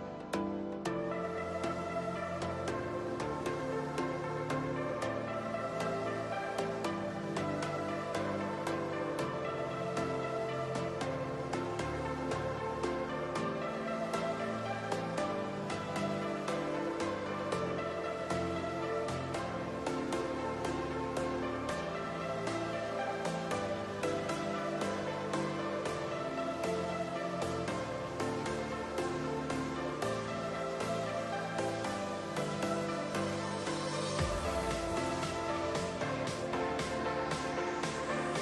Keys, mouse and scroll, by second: 3.0 click, 3.7-5.3 shift+middle drag, 5.3 KP_1, 6.4-7.6 scroll up 3, 7.6 Tab, 8.4 1, 9.3 click, 11.1 x, 13.0-14.3 middle drag, 14.3 click, 15.1 x, 16.6 middle click, 17.2 scroll up 1, 17.3 click, 18.0 alt+click, 18.2 alt+click, 19.3 ctrl+click, 20.5 ctrl+click, 23.2-26.0 right drag, 26.0-27.5 middle drag, 27.5 ctrl+r, 30.2-31.3 middle drag, 31.3 1, 31.8 scroll up 2, 32.8 click, 33.8 shift+click, 35.3 alt+m, 38.0 click.